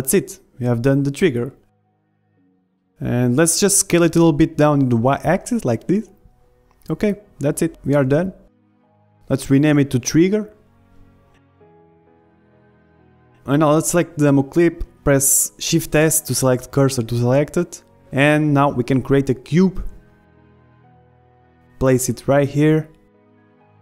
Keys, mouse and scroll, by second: 0.0 ctrl+r, 0.0 a, 0.1 b, 0.3 click, 0.8 a, 0.8 b, 1.0 click, 1.3 ctrl+z, 1.5-5.9 middle drag, 1.6 Tab, 2.4 z, 3.9 s, 7.1-9.3 middle drag, 9.6 KP_1, 10.4 click, 10.9 g, 11.4-13.7 middle drag, 13.7 KP_1, 13.7 middle click, 14.2-17.9 drag, 14.6 shift+s, 18.1 shift+a, 18.3-20.9 middle drag, 20.9 s, 22.0-23.8 drag, 22.8 s.